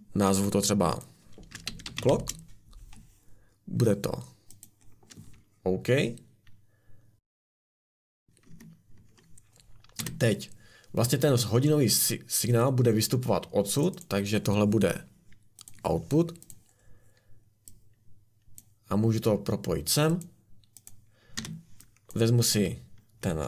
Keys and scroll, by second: 1.3-2.6 typing, 8.5 `, 10.0 Escape, 21.4 Escape.